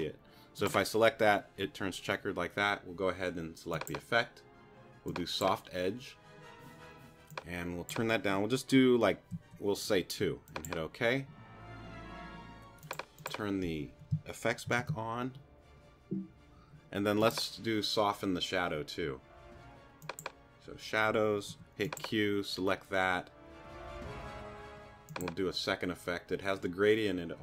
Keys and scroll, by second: 9.3 2, 14.7 super+r, 21.5 q.